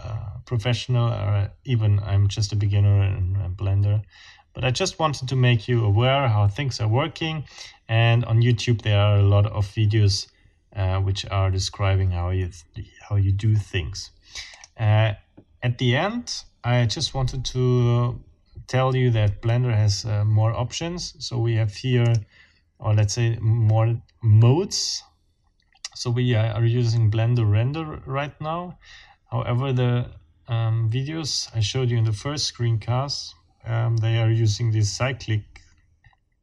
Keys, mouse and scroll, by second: 14.5 click, 22.0 click.